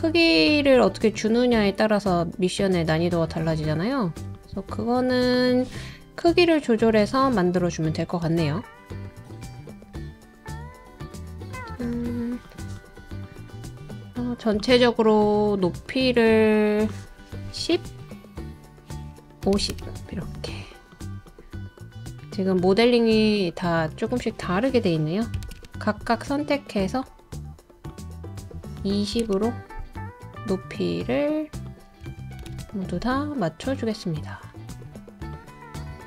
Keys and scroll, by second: 6.9 super+d, 19.2-20.0 typing, 25.1-25.9 typing, 28.8-29.2 typing, 32.0-32.4 typing, 35.0-36.0 typing.